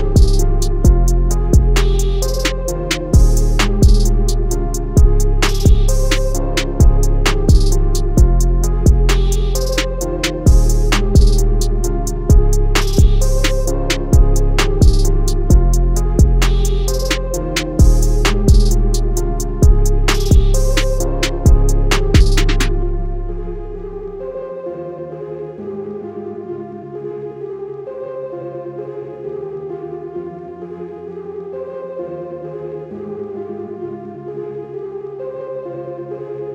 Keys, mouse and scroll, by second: 1.9 click, 7.2 Escape, 10.9-11.4 scroll up 1, 12.9 shift+click, 13.9 click, 16.5 click, 17.8 z, 18.3 click, 22.0 z, 22.6 z, 23.0 z, 24.1 click, 27.1 z, 27.8 click, 33.3 Escape, 34.1 ctrl+click, 35.8 ctrl+click, 36.2 ctrl+click.